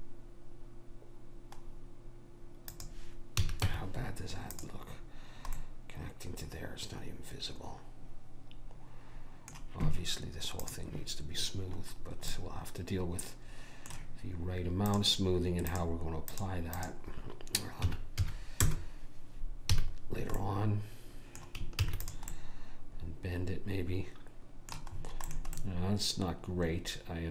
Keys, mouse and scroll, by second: 3.4 a, 3.7 Tab, 10.7 click, 13.2-14.7 middle drag, 14.9-18.7 drag, 19.8 a, 21.9 ctrl+s, 25.4-27.3 middle drag.